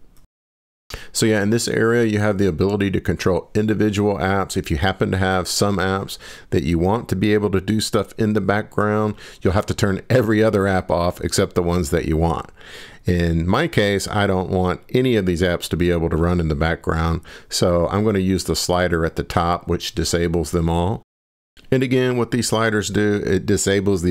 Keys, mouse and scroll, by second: 0.5 click, 3.1-4.4 scroll down 10, 5.2-5.6 scroll up 5, 5.8-7.0 scroll down 5, 7.0 scroll down 1, 7.9-8.4 scroll up 1, 8.4 scroll, 9.6 scroll up 1, 10.3 scroll up 2, 12.6-13.2 scroll up 1, 13.2 scroll up 1, 13.3 scroll down 2, 13.9 scroll down 1, 14.1 scroll down 4, 15.0-16.4 scroll down 8, 18.2 scroll down 1, 19.3-20.6 scroll up 24, 23.3 click.